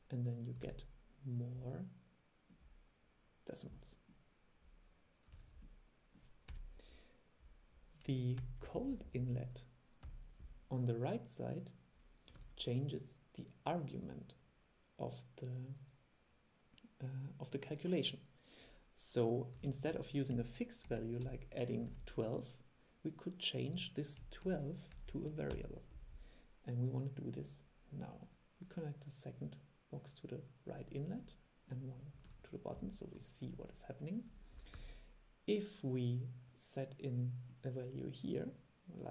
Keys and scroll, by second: 0.8 super+e, 5.5 super+e, 12.5 super+e, 19.7 super+e, 32.4 super+3, 34.9 super+e.